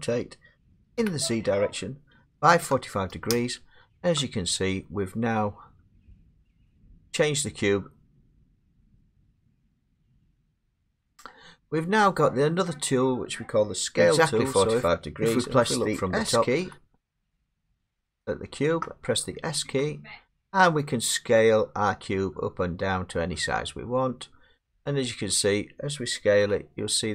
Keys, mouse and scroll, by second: 1.0 z, 2.5 typing, 3.3 Return, 6.5 typing, 9.1 middle click, 9.9 7, 10.4 middle click, 11.9 middle click, 12.7 middle click, 12.8 middle click, 14.9 click, 16.6 s, 18.3 click, 19.1 scroll, 19.7 s, 24.8 click, 26.4 s.